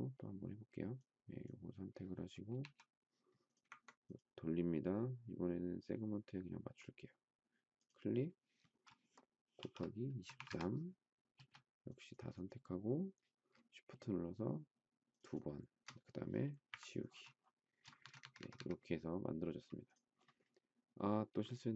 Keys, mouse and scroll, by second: 2.6 q, 9.3-11.3 typing, 15.1 shift+click, 15.3 shift+double click, 16.7 Delete, 17.6 space, 18.0 Escape, 18.1 Escape.